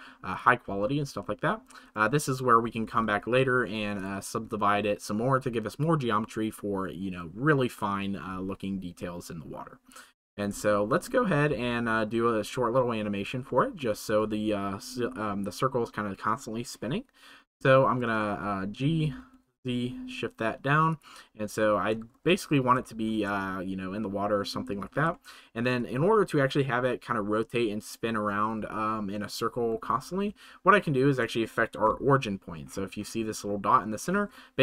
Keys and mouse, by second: 10.6-11.1 shift+middle drag, 13.4-13.7 shift+middle drag, 17.7 shift+middle click, 21.5 shift+middle drag, 22.8 shift+middle click, 24.9 ctrl+s, 25.1-25.6 shift+middle drag, 30.9 middle drag, 34.0-34.6 middle drag.